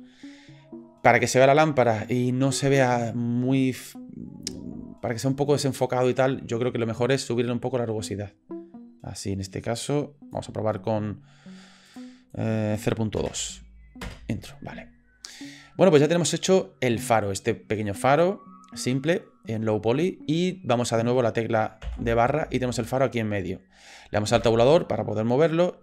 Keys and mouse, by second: 8.2-10.3 drag, 12.0-14.6 drag, 21.8 KP_Divide, 24.3 Tab, 24.8-25.1 middle drag.